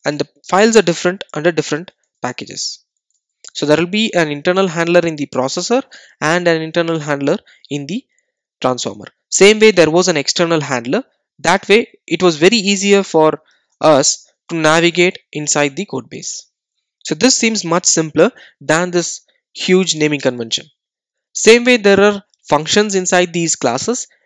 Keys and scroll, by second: 6.0 super+c, 7.6 super+v, 10.6 super+d, 16.7 super+d.